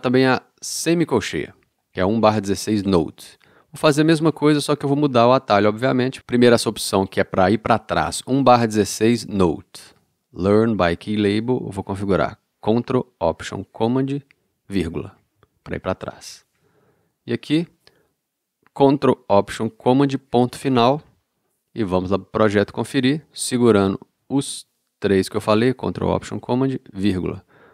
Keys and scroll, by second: 15.1 ctrl+alt+super+,, 20.3 ctrl+alt+super+., 27.2 ctrl+alt+super+,.